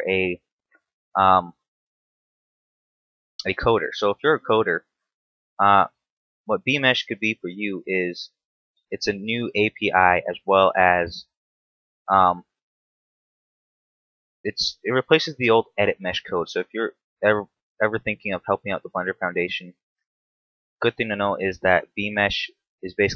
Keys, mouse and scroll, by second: 0.0-0.5 scroll down 1, 0.5 shift+middle click, 1.1 Tab, 1.3 scroll up 2, 1.8 shift+middle click, 2.3 a, 5.6 right click, 6.0 shift+right click, 6.4 shift+right click, 7.9 shift+right click, 8.2 shift+right click, 8.6 shift+right click, 9.4 shift+right click, 10.0 shift+right click, 11.1 f, 11.5 scroll down 1, 12.0 shift+middle click, 12.4 scroll up 1, 12.5 middle click, 14.1 right click, 14.4 shift+right click, 15.0 right click, 15.3 middle click, 17.8 ctrl+KP_7, 18.5-19.0 scroll up 3, 19.0 shift+middle click, 20.0 shift+right click, 20.4 shift+right click, 20.9 shift+right click, 21.8 f, 22.3 middle click.